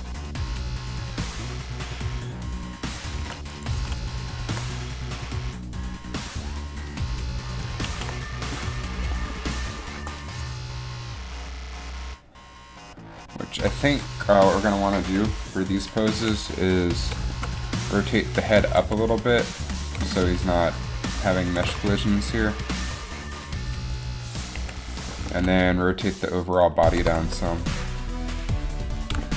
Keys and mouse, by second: 3.4 alt+a, 4.0 alt+a, 8.1 alt+a, 14.4 Down, 15.2 KP_3, 16.3 a, 18.6 r, 21.6 r, 24.8 KP_3, 27.0 r.